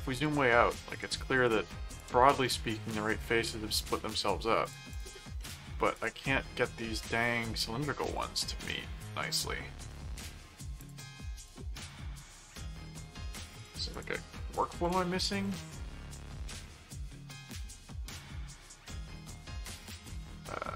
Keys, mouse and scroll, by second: 0.9 click, 2.0 click, 2.4 middle click, 3.4 click, 4.6 click, 5.4 middle click, 5.9 click, 6.4 middle click, 7.2 middle click, 8.1 click, 8.6 middle click, 9.9 middle click, 10.8 click, 11.7 click, 12.2 middle click, 13.6 click, 14.5 click, 15.2-17.3 typing, 18.9 s, 19.4 BackSpace, 20.4-20.7 typing.